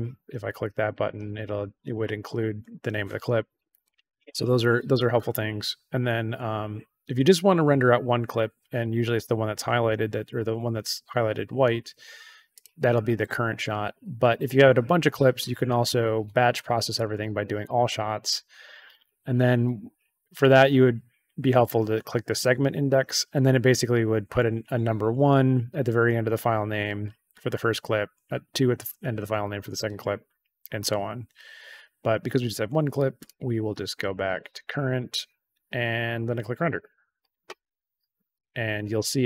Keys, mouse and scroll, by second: 0.8 click, 3.8 click, 12.5 click, 16.9 click, 22.2 click, 33.1 click, 33.9 click, 36.6 click, 38.3 click.